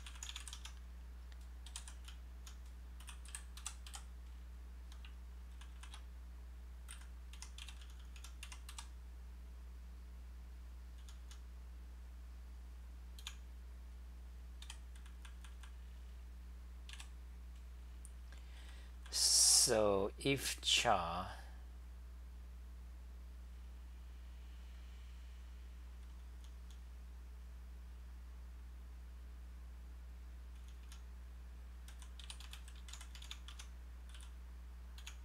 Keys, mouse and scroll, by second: 0.6 Home, 0.6-4.4 typing, 5.7 ctrl+c, 7.1-9.0 typing, 10.8-11.7 typing, 13.2 e, 14.4-16.0 typing, 18.4-20.0 typing, 26.1 t, 26.3 t, 26.6 t, 30.6-32.9 typing, 33.5 Home, 34.1-35.2 typing.